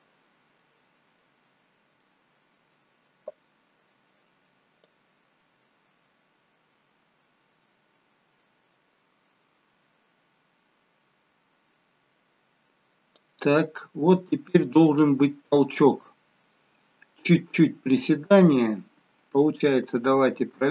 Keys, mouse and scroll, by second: 0.1-0.6 scroll down 4, 0.6 middle click, 2.2-3.3 scroll down 2, 5.1 click, 13.8-14.2 scroll up 3, 14.2 shift+middle click, 15.6-16.1 scroll down 1, 16.1 middle click, 18.6 click, 19.4 middle click.